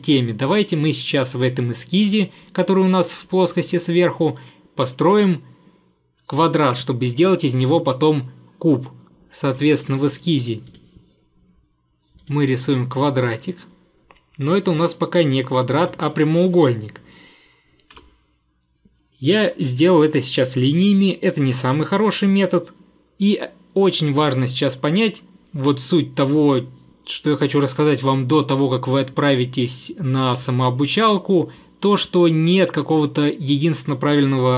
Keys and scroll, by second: 18.0 Escape.